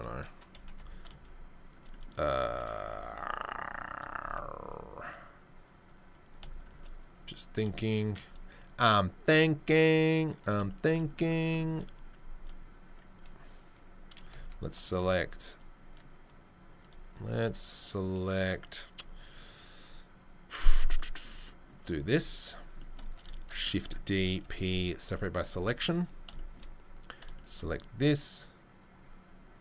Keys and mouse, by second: 0.6 3, 1.2 right click, 1.6 click, 4.2 Tab, 4.9 click, 6.0 click, 6.5 click, 8.2-9.3 middle drag, 9.3-13.1 drag, 11.3 Tab, 13.1-15.2 middle drag, 15.2-16.9 drag, 16.9 shift+middle click, 17.0-18.8 shift+drag, 18.8-20.7 shift+middle drag, 20.7 shift+right click, 20.8-28.1 middle drag, 24.4 p, 25.5 Tab, 28.1 right click, 28.2-28.7 middle drag, 28.7 right click, 28.8-29.6 middle drag.